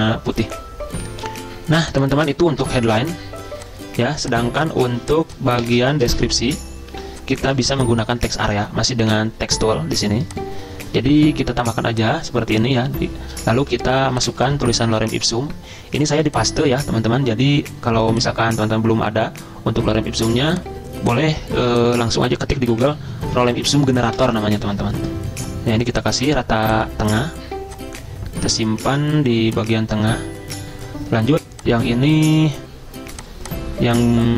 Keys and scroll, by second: 2.7 BackSpace, 6.3 c, 7.0 ctrl+g, 13.7 ctrl+v, 14.5 ctrl+a, 22.8 ctrl+shift+Up, 23.4 ctrl+x, 23.5 ctrl+a, 24.2 ctrl+v, 24.7 ctrl+a.